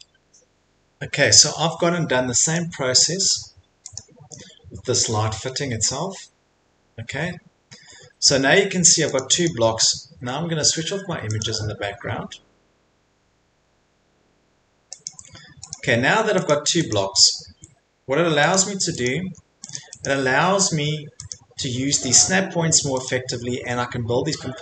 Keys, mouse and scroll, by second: 2.5 click, 3.9 click, 5.0 scroll, 6.2 middle click, 6.2 middle click, 6.6 middle click, 6.6 middle click, 7.5 middle click, 7.9 middle click, 8.3 middle click, 8.6 Escape, 9.2 click, 9.2 scroll, 9.4 click, 9.6 Escape, 11.4 middle click, 11.4 click, 15.0 click, 15.7 click, 16.1 Escape, 16.5 click, 16.9 click, 18.5 click, 19.0 click, 19.3 Escape, 19.7 click, 20.0 click, 21.3 click, 23.0 click, 23.5 Escape, 23.8 middle click, 23.9 middle click.